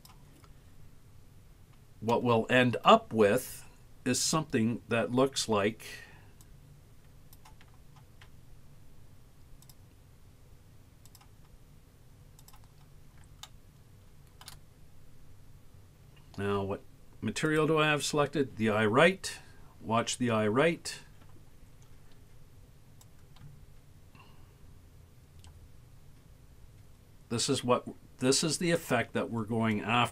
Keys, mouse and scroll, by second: 1.2-1.7 scroll up 3, 2.1 middle click, 6.4-7.4 drag, 9.7-10.9 drag, 11.1-12.6 drag, 13.5 shift+middle click, 15.0-16.6 scroll up 8, 17.5 click, 23.1-28.9 drag, 29.7-30.1 shift+drag.